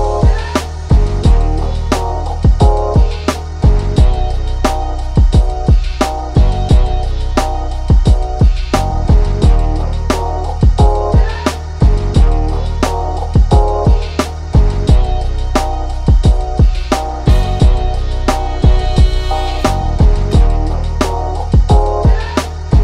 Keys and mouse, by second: 0.0 click, 3.8 ctrl+shift+], 4.0 click, 5.1 ctrl+g, 5.3-12.1 drag, 13.6 click, 13.7 ctrl+z, 15.2-17.6 drag, 17.6-22.8 drag.